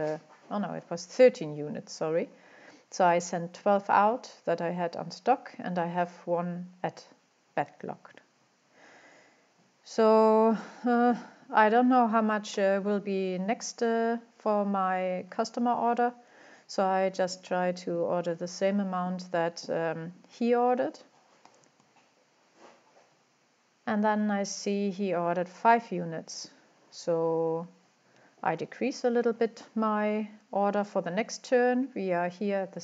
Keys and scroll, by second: 14.9 typing, 29.0-29.4 typing.